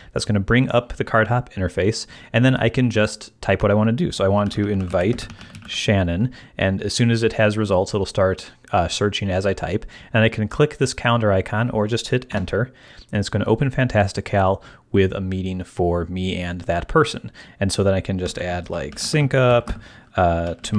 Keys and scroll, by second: 4.1-6.1 typing, 12.3 Return, 18.1-20.7 typing.